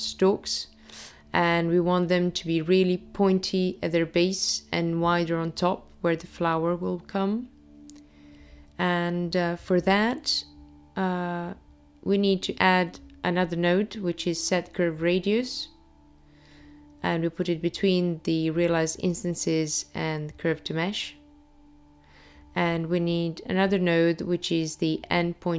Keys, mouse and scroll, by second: 0.9 click, 1.8 click, 3.8 click, 6.2 shift+a, 15.3 click, 17.0 shift+a, 23.7 click.